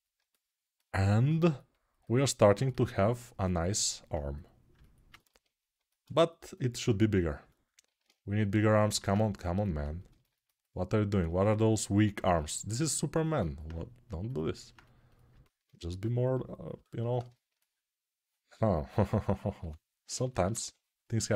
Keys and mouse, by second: 15.6 2, 19.6 2.